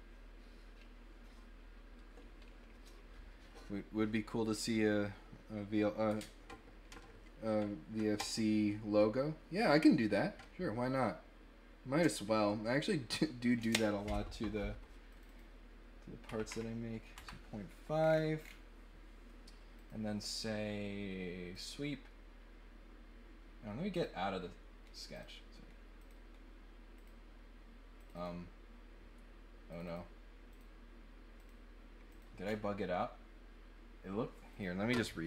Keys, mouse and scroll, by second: 15.0 click, 15.2 click, 17.9 middle click, 18.4 middle click, 19.7 click, 21.5 click, 23.9 click, 25.1 click, 26.0 click, 26.9 click, 27.9 click, 28.2 click, 29.7 click, 29.8 click, 30.5 click, 31.4 click, 32.1 click, 32.4 scroll down 1, 34.5 click.